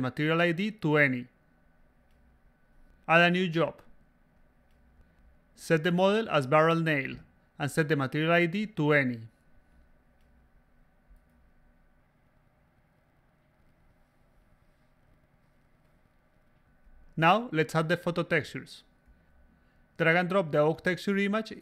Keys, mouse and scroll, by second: 1.1 click, 1.9 click, 3.6 click, 4.4 click, 4.7-5.6 typing, 6.5 click, 7.5 click, 9.5 click, 10.5 click, 10.9 click, 12.5 c, 14.1-15.5 typing, 15.5-16.0 drag, 16.1 click, 16.7-17.2 drag, 19.3 click, 20.1-21.4 drag.